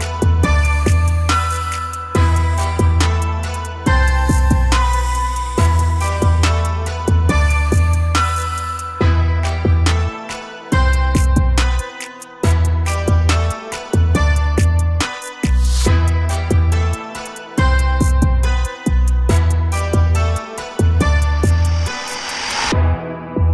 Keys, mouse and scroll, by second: 0.5 a, 0.6-1.2 scroll down 1, 1.2 shift+middle click, 2.1 Tab, 5.8-6.8 drag, 7.7-10.3 drag, 11.3 click, 14.1-15.7 drag, 15.7-16.5 scroll down 3, 16.5-17.0 shift+middle drag, 17.0-18.0 scroll up 2, 18.0-18.8 shift+middle drag, 18.8 click, 19.2 shift+click, 19.7 shift+click, 20.2 shift+click, 20.8 shift+click, 21.3 shift+click, 21.8 shift+click, 22.5-23.5 shift+middle drag.